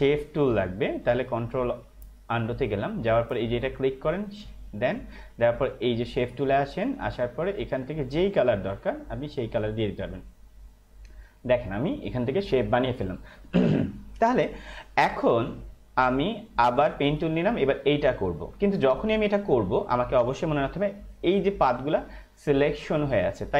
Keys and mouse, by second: 1.4 ctrl+alt+z, 4.2 click, 16.6 click.